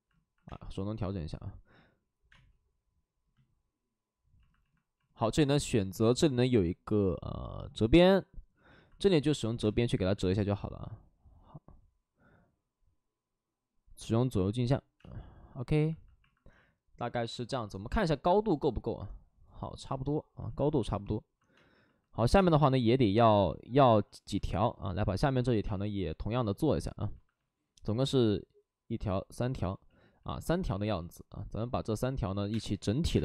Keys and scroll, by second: 0.4 space, 2.2 space, 8.0 ctrl+d, 8.4 ctrl+d, 9.5 space, 10.1 space, 15.3 space, 21.4 space, 25.5 space, 29.4 ctrl+z, 29.7 ctrl+z, 30.6 w, 32.3 3, 32.4 space, 32.8 x, 33.0 space.